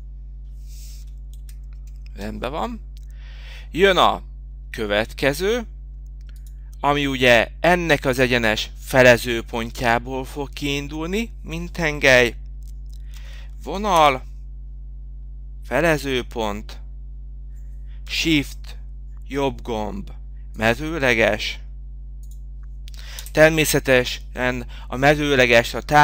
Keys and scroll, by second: 9.2 e, 9.8 l, 13.7 Return, 17.8 Return.